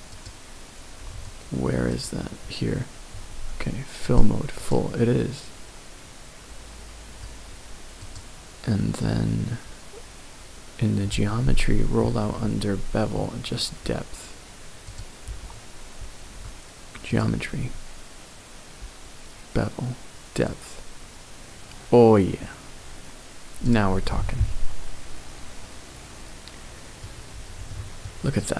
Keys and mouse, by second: 1.9 click, 4.0 click, 17.1 click, 20.4-23.7 drag, 24.1-27.0 middle drag, 27.7 shift+middle click, 28.4 middle click.